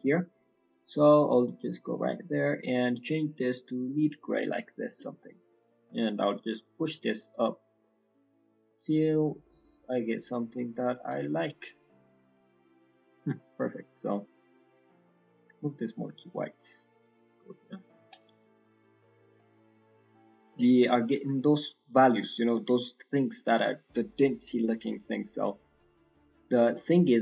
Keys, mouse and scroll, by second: 0.9 click, 2.6 click, 5.9 click, 6.7 click, 11.5-12.3 scroll down 8, 12.0 middle click, 12.3-12.7 scroll up 5, 12.7 middle click, 13.8 click, 14.4 click, 18.3-19.0 scroll down 7, 19.0 middle click, 19.7-20.2 scroll up 4, 20.2 middle click, 21.0-21.7 scroll down 3, 21.3 middle click, 21.9 scroll down 4, 22.1 middle click, 22.5 middle click, 22.5-23.1 scroll up 5, 23.1 middle click, 24.6 middle click, 25.9 scroll down 4, 26.2 middle click, 26.6 middle click, 27.0 middle click.